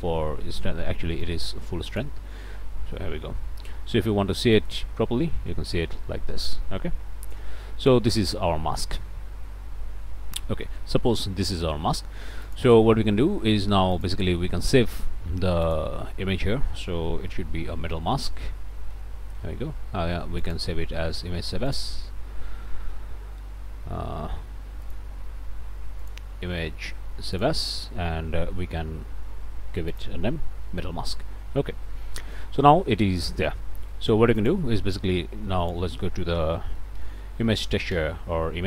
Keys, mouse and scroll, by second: 2.2 ctrl+click, 2.5 ctrl+space, 7.1 click, 8.7 middle click, 10.2 middle click, 12.4 click, 13.9 click, 15.6 click, 17.3 m, 17.3 e, 18.9 Return, 20.4 click, 21.7 click, 22.9 Escape, 24.8 click, 26.0 click, 27.3 click, 29.9 click, 31.5 middle click, 32.1 shift+click, 33.9 click, 34.4 shift+click, 34.9 shift+a, 35.6 click, 36.8 i, 37.0 m, 37.1 a, 37.6 Down, 37.9 Return.